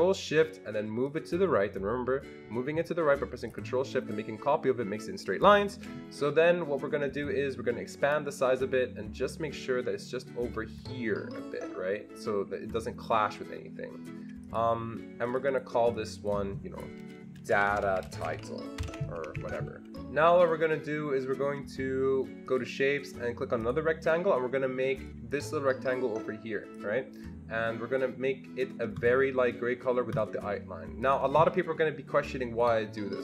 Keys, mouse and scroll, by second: 1.1-15.9 ctrl+shift+drag, 15.9-18.2 drag, 17.1-19.3 typing, 19.3 Escape, 19.5 Escape, 19.8 Delete, 19.8 click, 20.4 click, 22.5 click, 23.6 click, 25.4-26.8 drag, 30.1 click, 31.0 click.